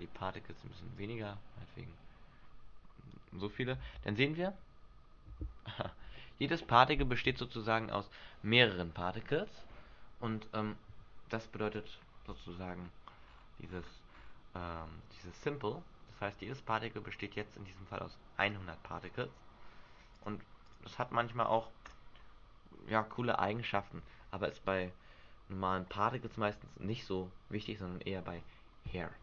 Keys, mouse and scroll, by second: 0.3-1.1 scroll up 4, 1.1 click, 3.9 alt+a, 11.9 Escape, 13.4-16.5 scroll down 15, 16.5 scroll down 1, 20.3 click, 20.8 click, 23.5 click.